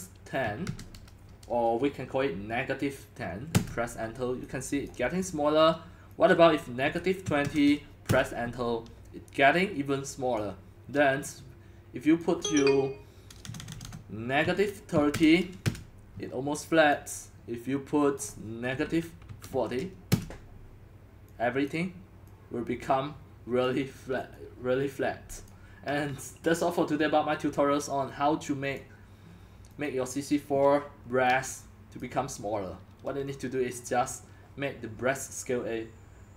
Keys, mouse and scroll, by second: 0.0-1.1 typing, 1.9 click, 3.5 Return, 4.1-4.8 typing, 4.9-9.5 drag, 7.0-10.0 typing, 10.4-13.4 drag, 13.4-15.7 typing, 15.2 click, 17.0 click, 18.0 click, 18.2 click, 18.4 click, 19.0-20.8 typing, 20.1-24.7 drag, 24.9-25.8 drag, 27.5-36.3 drag.